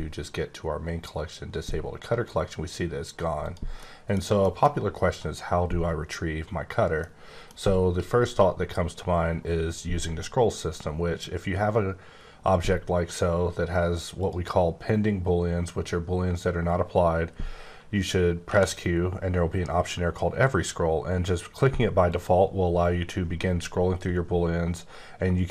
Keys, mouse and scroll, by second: 3.4 click, 3.9 middle click, 6.6 scroll down 2, 6.9 middle click, 14.1 click, 18.4 q, 22.1 click, 22.8-23.3 scroll down 1, 23.3-24.2 scroll down 1, 24.2 scroll down 1, 25.1-25.5 scroll up 1.